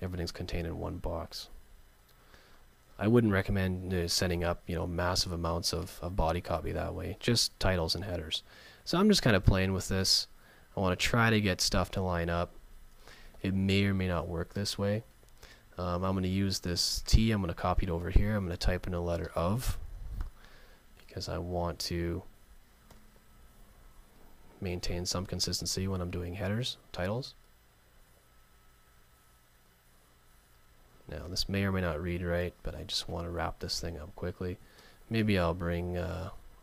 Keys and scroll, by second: 30.5 super+z.